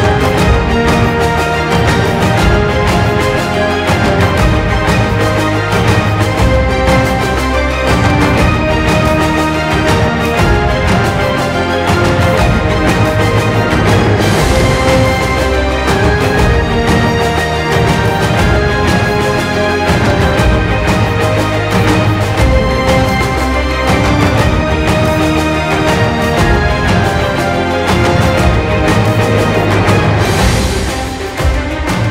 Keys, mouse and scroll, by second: 0.6 click, 1.0 space, 1.1 click, 1.2 space, 1.8-2.3 click, 2.3 space, 2.4 click, 2.5 ctrl+click, 2.8 space, 2.9 click, 3.2 space, 3.6 ctrl+click, 5.9 ctrl+x, 6.9 click, 9.2 space, 9.3 click, 9.4 space, 9.9-10.4 click, 11.9 space, 12.0 click, 12.1 space, 12.8 click, 14.0 space, 14.0 click, 15.3 space, 15.4 click, 15.6-15.9 alt+right click, 16.4 click, 17.0 space, 17.1 click, 17.2 space, 17.7 drag, 20.9 ctrl+space, 21.3 alt+right click, 22.0 click, 22.5 space, 22.6 drag, 24.7 drag, 26.4 space, 26.5 click, 26.6 space, 27.4 click, 27.8-28.2 shift+click, 28.3 shift+space, 29.1 shift+click, 30.1-30.5 click, 30.6-32.1 typing, 30.7 click, 31.4-31.8 shift+click.